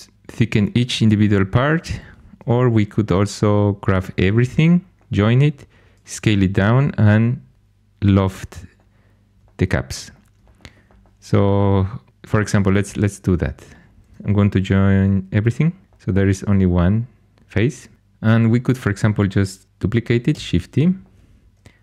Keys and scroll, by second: 15.8 j, 20.3 shift+d.